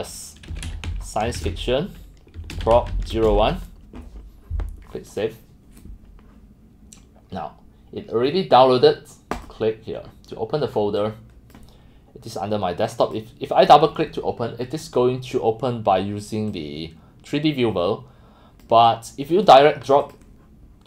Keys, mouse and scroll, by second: 0.5-3.9 typing, 5.1 click, 6.4 middle drag, 9.3 click, 11.0 click, 12.9 click, 15.0 scroll, 15.6 scroll, 18.6-20.6 drag.